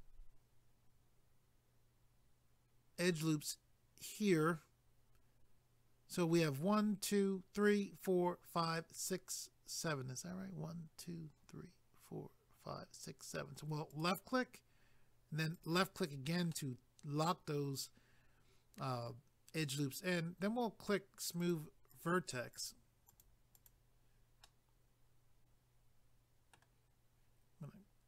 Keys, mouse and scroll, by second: 13.9 click, 15.5 click, 16.5 middle click, 21.4 click, 21.9 click, 22.1 double click, 22.5 click, 23.1 click, 23.5 click, 24.4 middle click.